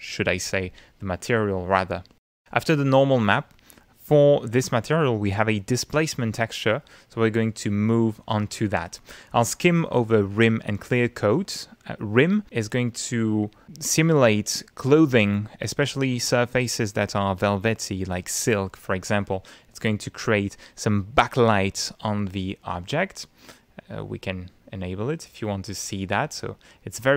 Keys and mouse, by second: 0.4 click, 3.2 click, 5.2 click, 24.7 click, 25.4 click, 26.9 middle click.